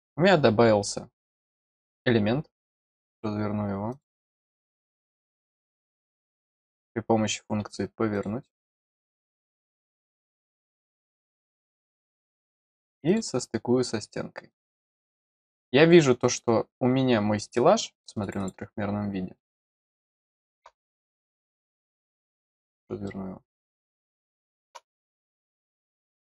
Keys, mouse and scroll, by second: 3.0 click, 3.9 click, 6.4 click, 8.1 click, 9.6 click, 11.5 click, 13.0 click, 14.4 click, 15.5 scroll up 1, 18.2 click, 18.3 click, 19.7 middle click, 23.0-24.7 middle drag, 25.9 click.